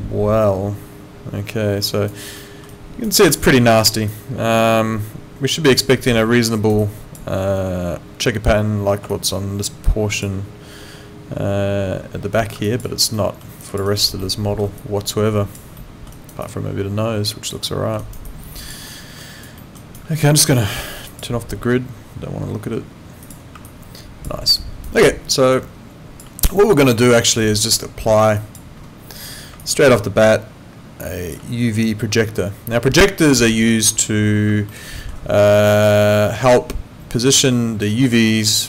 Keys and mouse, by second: 1.9 alt+right click, 2.4 alt+middle click, 2.7 alt+right click, 3.4 alt+right click, 4.1 alt+click, 6.2 alt+middle click, 6.6 alt+right click, 6.8 alt+click, 9.1 alt+click, 12.7 alt+click, 12.8 alt+right click, 13.2 alt+middle click, 13.6 alt+click, 13.9 alt+right click, 14.2 alt+middle click, 14.8 alt+click, 15.8 alt+middle click, 16.1 alt+right click, 16.4 alt+click, 17.7 alt+middle click, 18.0 alt+right click, 18.2 alt+click, 18.9 alt+middle click, 19.2 alt+right click, 19.6 alt+middle click, 19.7 alt+right click, 21.1 click, 23.2 click, 23.6 alt+click, 24.6 alt+right click, 25.5 alt+click, 28.4 click, 29.6 alt+click, 34.7 alt+middle click.